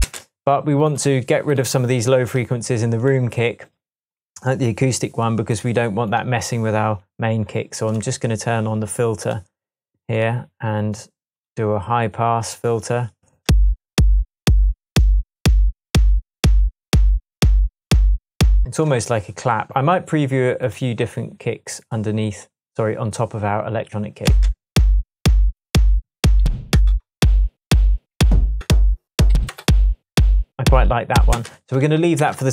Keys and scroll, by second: 0.0 space, 13.5 space, 18.8 space, 24.2 space, 26.4 Down, 26.7 Return, 28.0 Down, 28.6 Return, 29.5 Return, 31.3 space, 32.2 super+s.